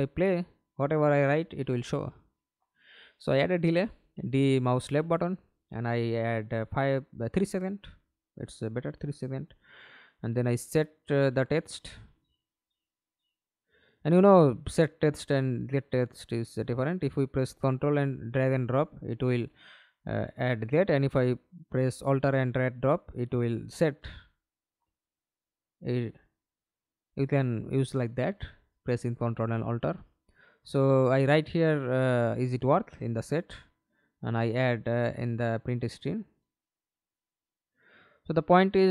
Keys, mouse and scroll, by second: 0.0 right click, 1.0 d, 1.5 d, 5.4 3, 5.7 Return, 6.5 right click, 7.8 right click, 9.1 double click, 15.0 ctrl+click, 17.3 alt+click, 19.2 right click, 19.2 alt+click, 24.6 Delete, 24.9-27.8 typing, 28.3 Return, 29.1 right click, 30.8 ctrl+c, 31.2 ctrl+right click, 32.3 ctrl+v.